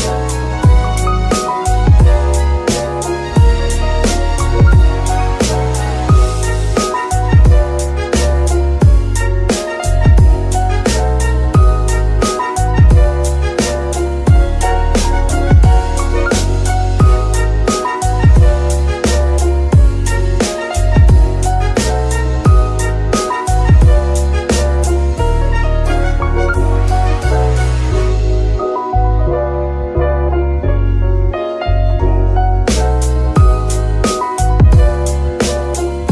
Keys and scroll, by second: 3.3 Tab, 3.7 s, 5.7 s, 7.9 KP_3, 9.5 g, 9.6 y, 28.1 KP_3.